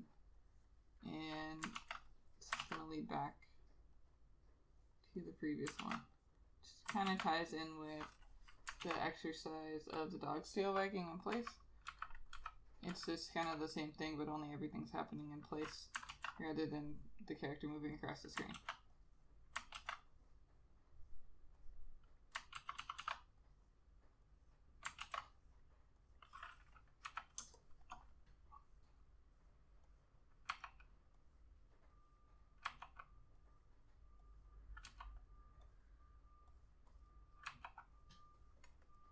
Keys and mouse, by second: 1.9 ctrl+z, 2.7 ctrl+z, 6.0 ctrl+z, 7.2 ctrl+z, 9.0 ctrl+z, 11.5 [, 12.0 ], 12.5 ], 13.6 ], 16.3 ctrl+z, 18.7 ctrl+z, 19.9 ctrl+z, 22.7 ctrl+z, 22.9 ctrl+z, 23.1 ctrl+z, 25.1 ctrl+z, 27.2 ], 27.5 space, 30.6 ], 32.8 ], 35.0 ], 37.0 double click, 37.7 ].